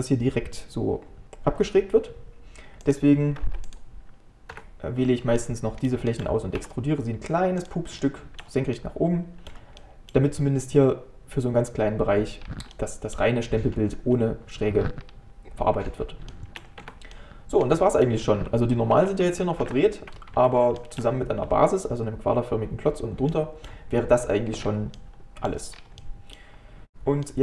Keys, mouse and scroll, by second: 4.2 shift+g, 5.1-5.4 scroll down 2, 5.4-6.6 middle drag, 6.6 e, 8.0-12.4 shift+middle drag, 12.4-12.7 scroll down 2, 12.7-15.0 middle drag, 15.0-16.3 scroll down 2, 16.3 shift+middle click, 16.8 Tab, 17.1-18.4 middle drag, 18.4 Tab, 19.6 shift+n, 20.4 Tab, 20.8-24.6 shift+middle drag, 24.6-25.0 scroll up 2, 25.0 middle click, 25.7 scroll down 3, 26.0 middle click, 26.9 scroll up 2, 27.3-27.4 middle drag.